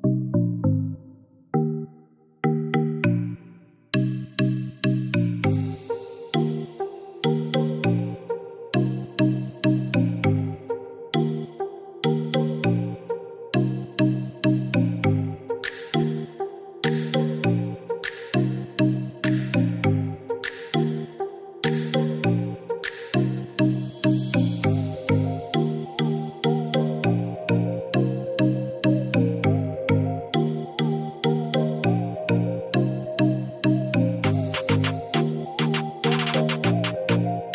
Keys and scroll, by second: 14.5 1, 14.9 0, 15.6 Return, 22.6-23.5 typing, 32.8 2, 33.1 5, 33.6 Return.